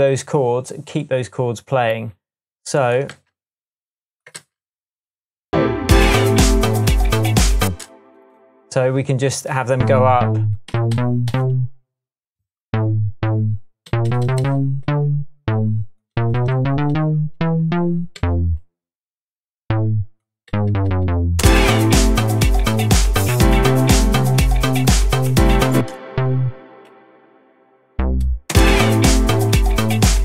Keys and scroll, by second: 3.1 c, 4.3 super+v, 7.6 space, 10.7 Up, 10.9 Up, 13.8 Up, 14.2 Up, 14.8 Up, 16.1 Up, 16.3 Up, 16.6 Up, 17.9 Up, 18.1 Down, 20.5 Down, 21.0 Down, 21.4 space, 25.7 space, 27.9 shift+Down, 28.5 shift+space, 29.2 space.